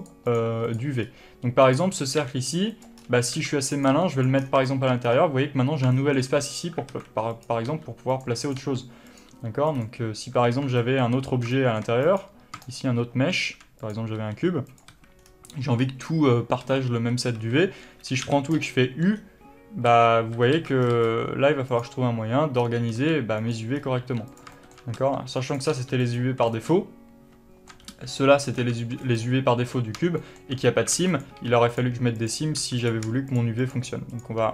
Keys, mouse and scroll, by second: 0.3 click, 0.6 click, 1.0 click, 1.3-1.9 scroll up 1, 1.9 click, 2.5 g, 3.1 click, 3.3-3.6 scroll up 1, 3.6 s, 4.1 click, 4.2 g, 4.5 click, 4.7 scroll down 1, 5.0-7.6 shift+middle drag, 5.3-6.2 scroll down 1, 7.2 alt+a, 7.6 click, 8.0 g, 8.7 click, 8.9 g, 9.4 click, 9.6 g, 10.1 click, 10.8 alt+a, 11.1-12.3 middle drag, 12.3 click, 12.9 shift+click, 13.3 shift+a, 14.5 g, 15.1 click, 15.2 a, 15.5 scroll down 1, 16.1-16.9 scroll up 1, 16.9 alt+a, 18.2 scroll up 1, 18.5 u, 21.1 scroll down 1, 21.2 a, 22.0 click, 22.9-23.2 scroll down 1, 23.2 s, 23.8 click, 24.1 scroll up 1, 24.3 g, 24.7 click, 24.8 shift+middle click, 25.3 s, 25.8 click, 26.0 g, 26.4 click, 26.8-28.8 shift+middle drag, 28.2 g, 28.8 click, 30.5 shift+middle click, 31.2 alt+a, 31.4 click, 31.6 3, 32.0 click, 32.5 click, 32.9 2, 33.1 click, 33.6 shift+click, 33.9 shift+click, 34.4 shift+click.